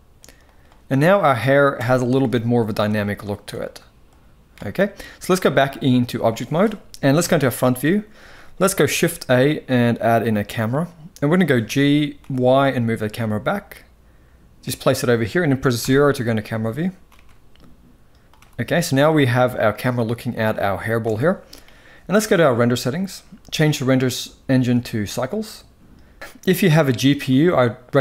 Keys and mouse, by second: 0.1 click, 0.6-1.0 middle drag, 1.4 KP_1, 1.4 KP_4, 2.7 shift+middle drag, 3.3-4.2 drag, 5.0-5.8 drag, 6.8 KP_1, 7.5 shift+middle drag, 8.6 shift+a, 10.3-11.0 middle drag, 11.3 g, 15.4 KP_0, 16.7 g, 18.0 g, 20.7 n, 23.4-24.8 drag, 26.2 ctrl+s, 27.0-28.0 drag.